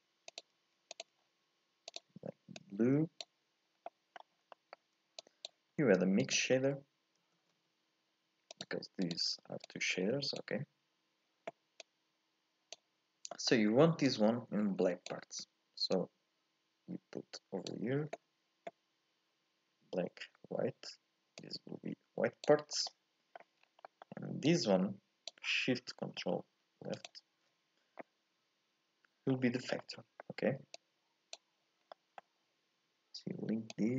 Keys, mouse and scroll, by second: 9.8 click, 12.0 click, 14.3 click, 17.8-21.6 drag, 22.8 scroll down 2, 22.9-24.7 middle drag, 24.7 click, 27.0 ctrl+shift+click, 28.0-33.9 middle drag.